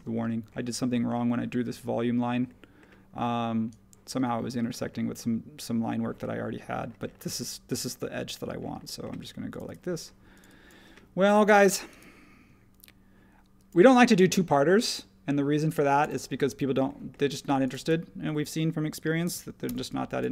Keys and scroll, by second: 19.2 super+g, 19.6 BackSpace.